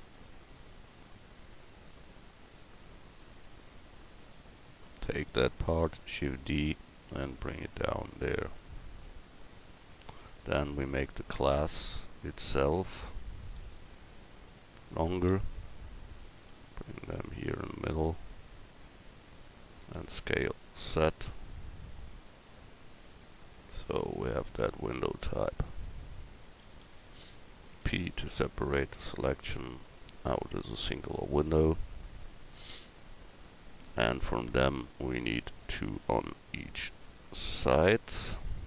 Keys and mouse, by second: 3.0 middle click, 5.8 shift+d, 6.9-9.0 drag, 9.7 Tab, 10.1-11.2 right drag, 11.2 Tab, 12.6 Tab, 12.9 Tab, 13.6 a, 15.3 l, 19.9 s, 24.0 Tab, 25.6 Tab, 26.6 a, 26.8 a, 27.8 p, 29.2 Tab, 36.4 KP_1.